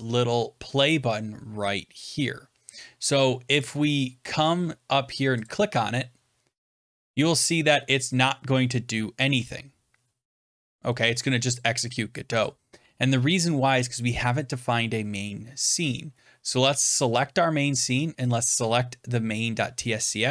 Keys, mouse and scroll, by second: 1.8-3.3 drag, 3.7-5.3 drag, 9.1 click, 12.3 click, 16.9 click, 18.3 click.